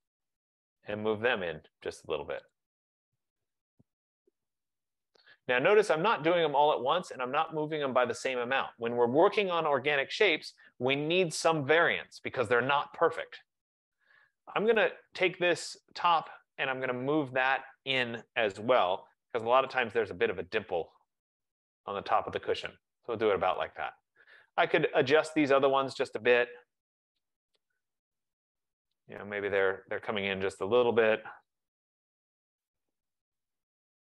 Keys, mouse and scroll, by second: 0.0 click, 0.9-1.4 typing, 2.6 click, 4.3 F15, 8.4 click, 14.8 click, 15.7 click, 16.4 click, 17.6 click, 18.5-18.8 typing, 18.8 Return, 19.8 click, 22.8 click, 24.8 click, 26.1 click, 26.8 typing, 28.2 click, 29.7 click, 30.7 click, 32.7 click, 33.4-33.8 typing.